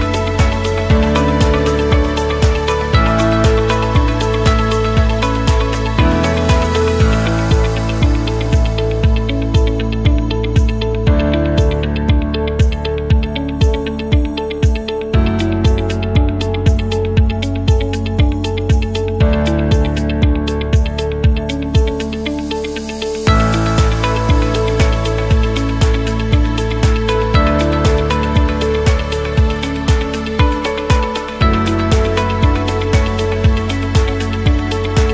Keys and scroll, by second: 11.7 Escape, 16.6-18.5 typing, 20.5 0, 20.8 Return, 22.6-23.5 typing.